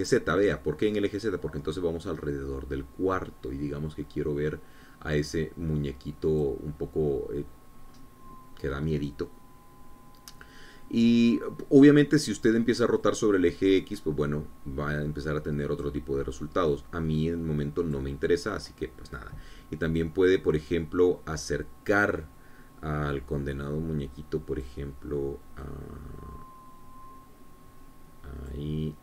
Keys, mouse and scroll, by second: 1.8-8.1 drag, 9.4 scroll up 2, 10.4 scroll down 2, 14.6-17.6 drag, 18.3-19.7 drag, 24.9-26.4 drag, 27.2-29.0 drag.